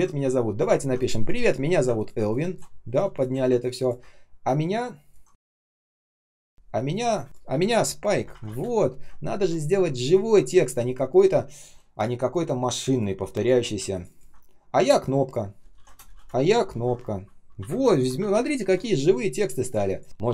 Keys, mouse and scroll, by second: 0.0-0.7 ctrl+scroll up 1, 0.7-1.8 ctrl+scroll down 1, 1.9 ctrl+click, 3.7 ctrl+click, 5.4 shift+a, 6.0 space, 7.2 Delete, 7.2 BackSpace, 8.2 ctrl+alt+-, 8.4 space, 9.1 ctrl+scroll down 1, 12.7 space, 13.2 space, 13.3 space, 13.8 ctrl+click, 14.0 ctrl+click, 15.6-16.5 typing, 17.5 Home, 18.1 ctrl+alt+Right, 18.5 space, 19.7-20.3 typing.